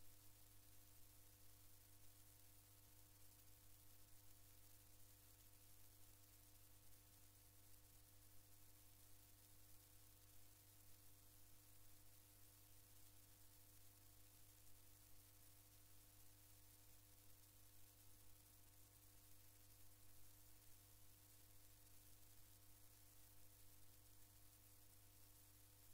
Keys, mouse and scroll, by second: 0.3 click, 1.8 click, 3.1 click, 6.3 click, 14.5 click, 18.5 click, 22.4 click, 25.0 click.